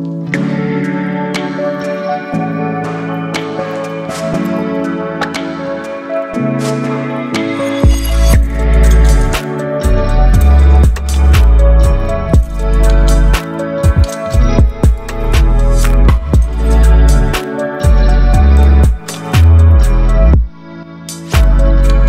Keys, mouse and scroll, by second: 0.2 alt+scroll down 1, 1.8-4.0 alt+right drag, 4.9-5.5 alt+right click, 6.1-12.0 drag.